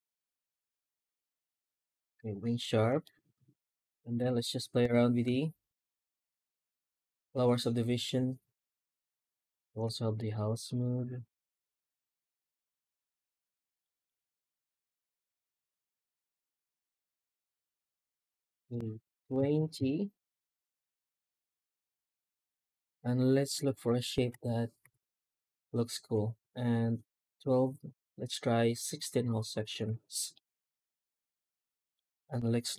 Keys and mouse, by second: 2.9 shift+middle click, 3.6 middle click, 4.1 F9, 13.3 shift+middle click, 13.7 middle click, 14.2 F9, 21.8 shift+middle drag, 22.1-23.4 middle drag, 23.7 shift+middle drag, 24.7 F9, 30.2-31.8 middle drag, 32.3 middle drag.